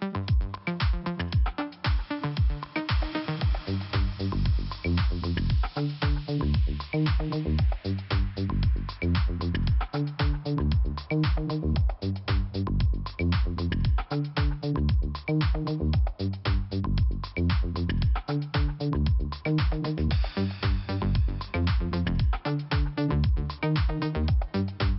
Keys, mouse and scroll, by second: 2.0 click, 2.1 click, 3.0 click, 4.4 click, 4.6 click, 5.5 click, 8.0 click, 10.3 click, 10.8 click, 10.9 double click, 12.0 double click, 14.3 click, 16.3 scroll down 1, 18.8 click, 19.4 scroll up 1, 20.8 click, 21.9 click, 24.6 click.